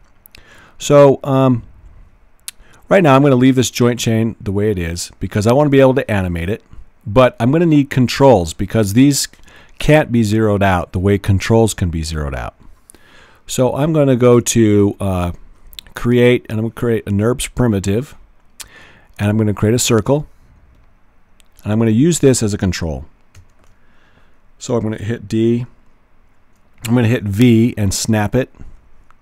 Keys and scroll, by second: 23.5 w, 26.9 v.